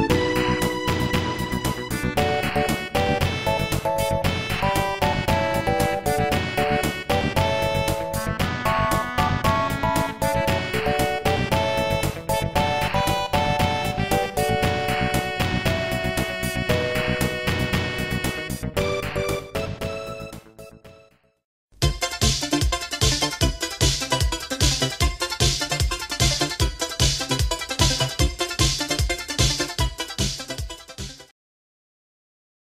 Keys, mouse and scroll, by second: 0.9 middle click, 1.5 c, 1.7 click, 6.0 click, 9.7 click, 14.9 right click, 16.0 scroll up 2, 19.8-20.2 scroll down 2, 22.5 scroll down 2, 23.4 ctrl+s, 24.5-26.8 typing, 27.5 scroll up 2, 28.7 click, 29.2 scroll up 2, 30.0 right click, 30.3 right click, 31.0 right click.